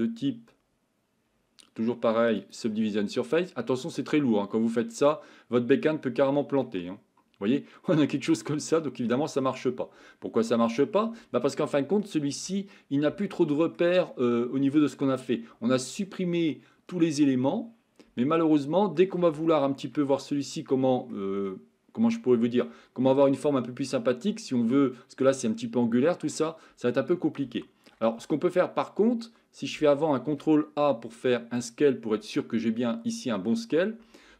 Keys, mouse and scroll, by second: 6.7-9.1 middle drag, 10.7 click, 11.5 middle click, 13.2 shift+middle click, 13.8 Tab, 14.1-15.8 middle drag, 16.5-19.0 middle drag, 19.5 shift+middle click, 20.1-21.1 middle drag, 21.5-22.6 middle drag, 25.0 middle click, 26.0-26.9 middle drag, 27.6 shift+middle click, 28.0 Tab.